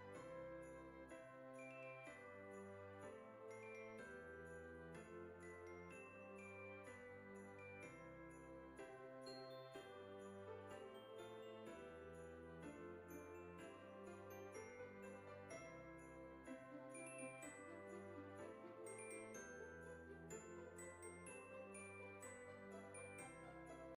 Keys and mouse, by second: 0.1 click, 1.4 click, 2.5 click, 6.3 click, 8.0 F6, 9.8 click, 13.3 F6.